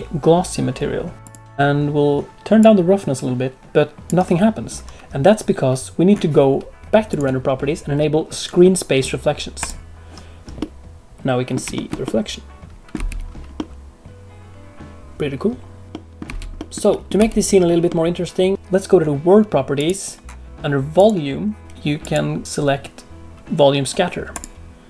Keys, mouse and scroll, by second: 2.5 click, 7.0 click, 9.6 click, 10.5 middle click, 11.7 shift+middle click, 12.0 middle click, 12.9 space, 13.5 middle click, 15.9 middle click, 16.2 space, 16.5 middle click, 16.8 middle click, 17.1 space, 17.8 middle click, 18.5 click, 19.7 click, 20.9 click, 22.0 click.